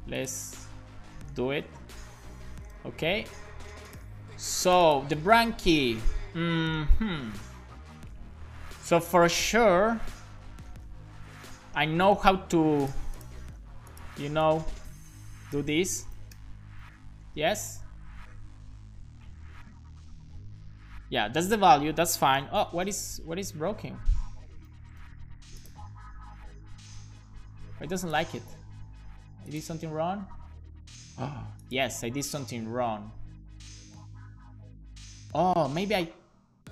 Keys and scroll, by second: 1.4 super+v, 2.7 alt+shift+f, 3.1 super+s, 5.2 super+c, 16.2 BackSpace, 16.8 super+v, 22.4 alt+shift+d, 22.7 super+s, 23.4 super+z, 24.7 super+v, 25.0 super+s.